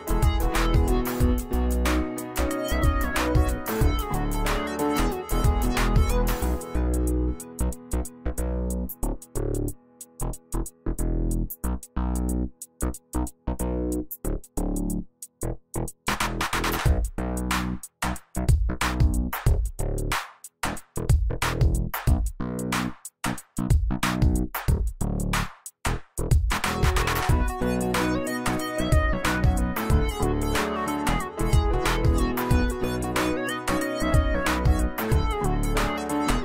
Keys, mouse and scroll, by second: 22.9 shift+click, 36.2 scroll down 1.